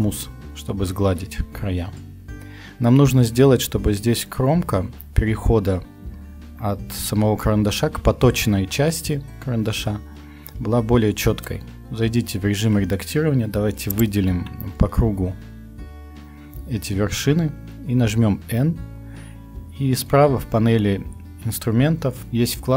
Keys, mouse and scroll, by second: 6.3 Tab, 15.3 middle click, 16.0 middle click, 16.2 middle click, 16.4 middle click, 16.5 middle click, 17.9 n.